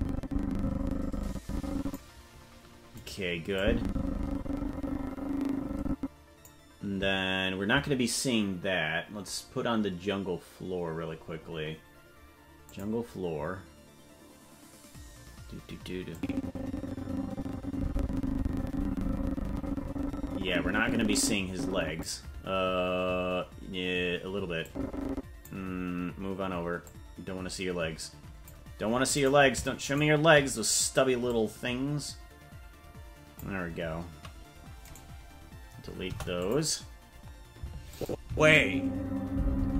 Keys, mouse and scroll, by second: 3.0 right click, 3.5-6.4 drag, 11.2-12.0 scroll down 10, 14.8 click, 16.1-22.0 drag, 24.6 click, 26.8-28.5 drag, 29.3 right click, 29.9 shift+right click, 31.2-33.4 drag, 34.8 right click, 36.0 Delete, 37.9 click, 38.2 space.